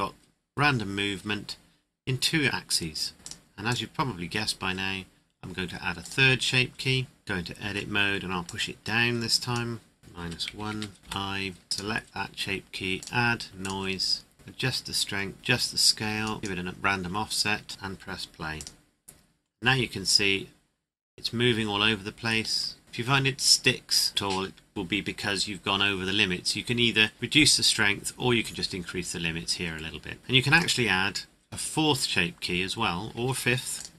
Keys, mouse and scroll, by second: 3.2 click, 6.0 click, 7.2 middle click, 8.4 click, 10.2 KP_Subtract, 10.4 KP_1, 10.7 KP_Enter, 11.2 i, 11.6 click, 18.5 click, 22.4-22.8 scroll down 1, 30.2 click, 33.8 click.